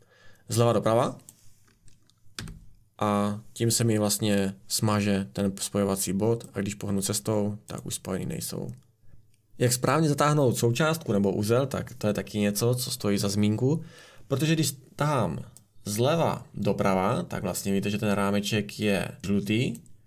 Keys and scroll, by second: 2.3 Delete.